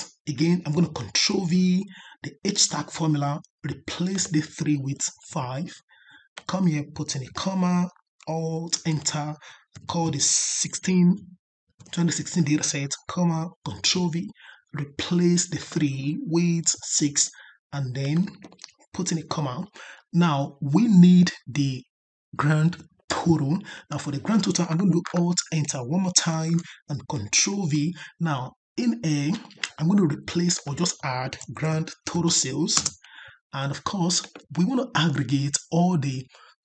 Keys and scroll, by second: 1.1 ctrl+v, 8.6 alt+Return, 13.7 ctrl+v, 26.2 alt+Return, 27.4 ctrl+v.